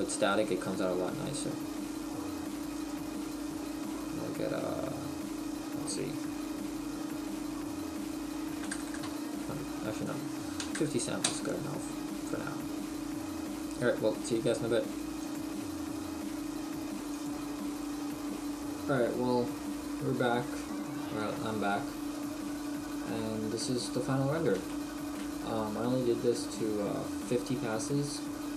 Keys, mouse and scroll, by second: 11.3 click.